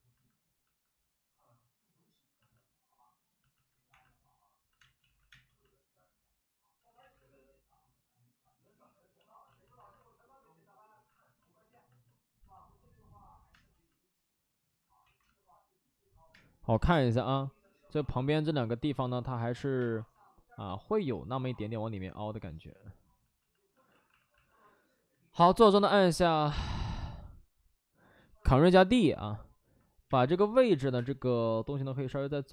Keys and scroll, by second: 3.8 1, 4.7 space, 4.9 ctrl+z, 5.2 space, 6.7 ctrl+z, 6.9 ctrl+z, 9.9 alt+s, 11.0 alt+s, 12.8 alt+s, 15.0 ctrl+z, 15.0 space, 16.2 space, 16.6 1, 16.8 space, 17.8 ctrl+z, 19.5 ctrl+z, 19.7 space, 22.4 ctrl+z, 22.7 ctrl+z, 23.7 ctrl+z, 23.8 alt+s, 24.1 alt+s, 25.5 ctrl+d, 27.1 ctrl+z, 28.1 ctrl+d, 29.9 ctrl+d, 30.0 space, 30.8 5, 30.8 space.